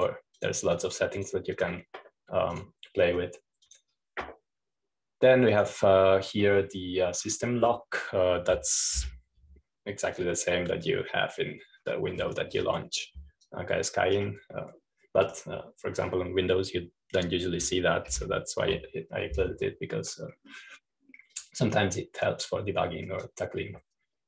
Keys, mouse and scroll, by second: 1.1-6.2 drag, 7.0 click, 8.9-9.4 scroll up 1, 10.6 super+-, 12.3 right click, 12.8-14.0 scroll up 1, 14.0-15.0 scroll down 1, 15.0-17.7 right drag, 21.4 super+-, 23.1-23.5 scroll up 1, 23.5-24.2 scroll down 1.